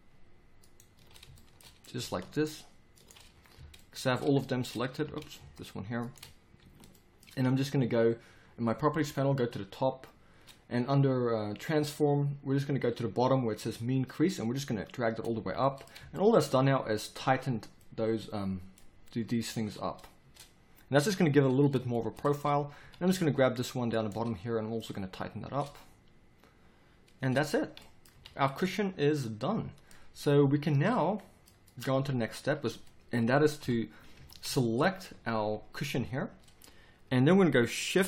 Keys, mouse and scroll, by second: 1.3 middle click, 3.3 middle click, 3.5 z, 5.0 z, 6.6 z, 9.8-15.4 middle drag, 15.4 z, 16.4 middle click, 18.9 middle click, 19.7 middle click, 22.8 a, 27.3 Tab, 28.1 a, 32.7 z, 33.6 KP_7, 34.1 z, 35.1 z.